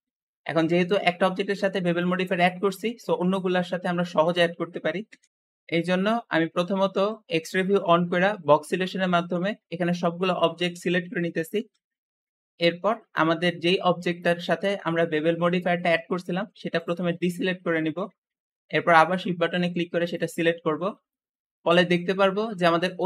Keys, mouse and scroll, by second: 0.8 middle click, 1.3-3.4 scroll up 2, 3.4 Escape, 3.4 scroll up 1, 3.6-3.9 scroll down 5, 3.9-5.0 middle drag, 5.0 KP_1, 5.1 KP_1, 5.3 alt+z, 6.9 alt+z, 7.8 b, 10.7 middle click, 11.5 alt+z, 11.6 alt+z, 11.9-12.2 scroll up 3, 12.2 shift+middle click, 12.8-13.4 scroll up 2, 14.1-16.7 shift+middle drag, 16.7 shift+click, 17.3-18.1 scroll down 4, 18.1-18.7 scroll up 4, 20.0 shift+click, 20.4-20.8 scroll down 5, 20.8 shift+middle click, 21.3-21.6 scroll up 2, 21.6-23.0 shift+middle drag, 22.7 `.